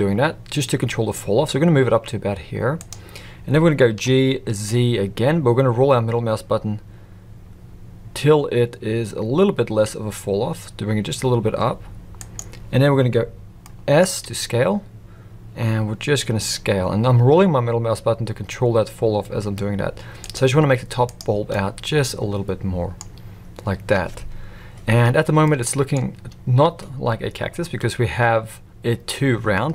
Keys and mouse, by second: 3.9 g, 13.6 middle click, 14.2 s, 20.6 z, 21.5-22.9 middle drag, 25.4 middle click.